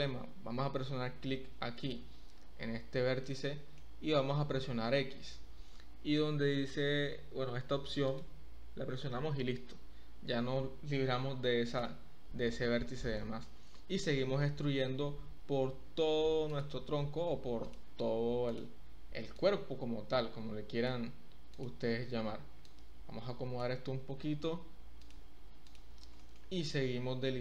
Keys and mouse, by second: 1.8 click, 3.2 shift+click, 4.9 x, 13.1 shift+click, 14.7 e, 15.4 z, 16.5 click, 18.4 click, 19.5-20.9 drag, 22.8 click, 25.0 click, 25.6 click, 26.1 shift+click, 26.7 e.